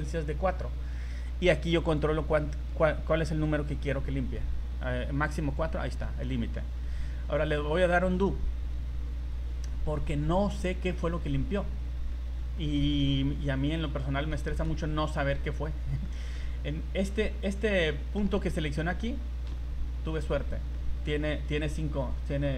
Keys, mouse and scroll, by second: 7.8 ctrl+z, 8.8-9.3 scroll up 6, 9.5 z, 10.1 right click, 10.4 z, 11.0 middle click, 11.7 scroll down 1, 12.1 middle click, 12.4 scroll down 1, 13.7 click, 14.2 scroll down 2, 14.5 shift+middle click, 14.8 scroll up 2, 16.0 middle click, 17.9 middle click, 19.4 KP_1, 20.4 scroll up 1, 20.7 shift+middle click, 21.2 scroll up 2, 22.3 scroll down 2.